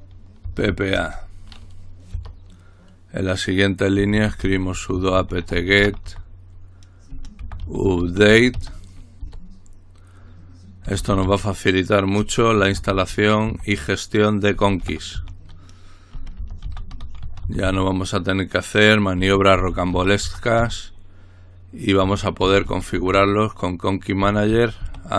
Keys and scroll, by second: 0.4-0.9 typing, 2.1 typing, 4.0-9.2 typing, 10.8-13.5 typing, 14.5-25.1 typing.